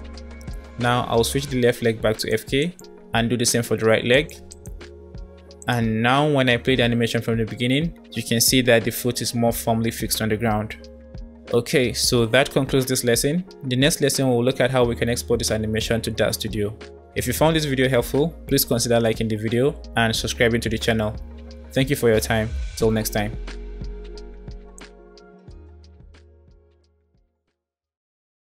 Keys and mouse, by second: 2.4 click, 3.2 click, 4.4 click, 5.5 click, 6.2 space, 8.4-8.7 drag, 10.4-10.8 drag, 15.3 space, 21.2 click, 22.3 click.